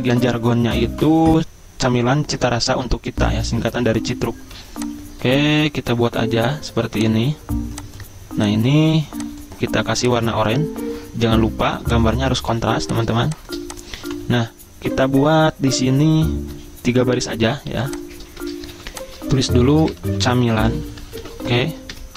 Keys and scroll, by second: 4.5 m, 12.5 z, 14.1 v, 17.7-22.1 typing, 21.9 ctrl+shift+].